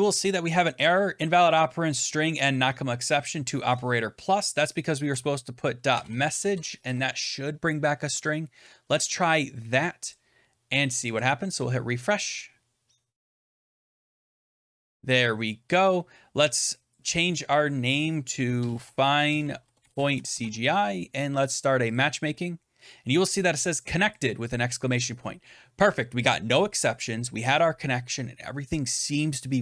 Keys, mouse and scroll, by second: 5.0-6.7 typing, 8.0 ctrl+s, 10.0 click, 11.1 click, 14.0 click, 14.2 alt+Tab, 16.8 click, 18.2-21.7 typing, 21.8 click, 24.1 click, 24.9 click.